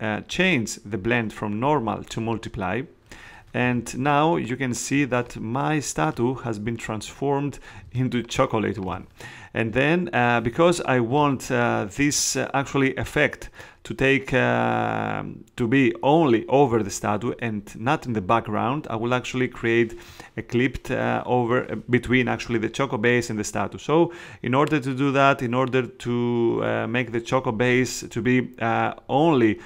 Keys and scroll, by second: 3.6 space, 7.8 space, 10.5 space.